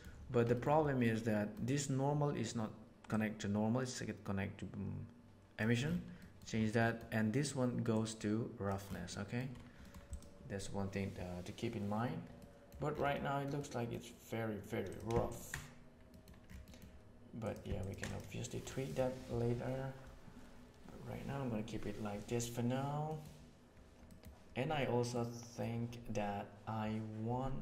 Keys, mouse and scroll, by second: 0.5 middle click, 1.0 middle click, 3.1-5.5 drag, 6.2 middle drag, 6.8 middle click, 7.9-8.6 drag, 9.1 middle click, 9.7 middle click, 10.1 click, 12.3 middle click, 13.1 middle click, 13.6 middle click, 15.2 ctrl+shift+click, 16.1 middle click, 16.7 middle drag, 17.3 click, 17.7 ctrl+shift+click, 23.1 middle click, 24.1 middle click, 25.1 middle click.